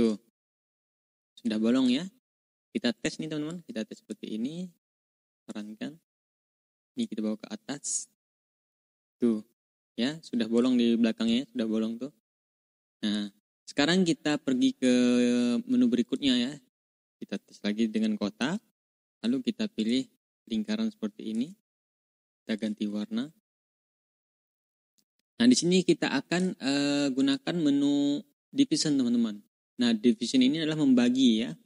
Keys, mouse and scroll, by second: 0.2 ctrl+scroll up 2, 0.7-1.9 drag, 2.9 click, 3.4 click, 5.0 click, 6.3 click, 6.8 click, 7.8 click, 8.4-10.6 drag, 10.7-11.0 ctrl+scroll up 2, 11.2-13.2 ctrl+drag, 13.3-13.8 ctrl+scroll down 2, 14.2 click, 16.0 click, 16.7-18.5 drag, 19.1 click, 19.7 click, 20.3 ctrl+click, 22.4 click, 23.4 click, 23.8 ctrl+click, 24.1-24.4 ctrl+scroll up 2, 24.8 click, 25.1-26.3 drag, 27.1 click, 29.6 click, 30.4 ctrl+scroll up 2.